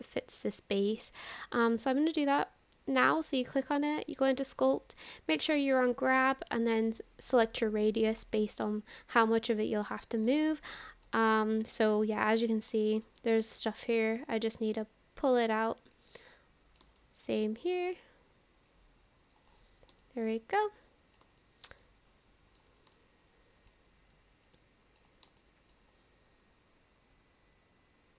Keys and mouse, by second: 3.5-4.6 drag, 8.7 middle click, 10.0 shift+middle click, 10.6 middle click, 11.4 shift+middle click, 11.8 middle click, 12.7 shift+middle click, 13.2 middle click, 14.3-15.9 drag, 16.4 middle click, 17.0 shift+middle click, 17.4 middle click, 18.7 click, 20.0 shift+middle click, 20.7 middle click, 21.4 shift+middle click, 21.8 middle click, 23.0 shift+middle click, 24.5 middle click, 25.4 shift+middle click, 26.4-28.1 drag.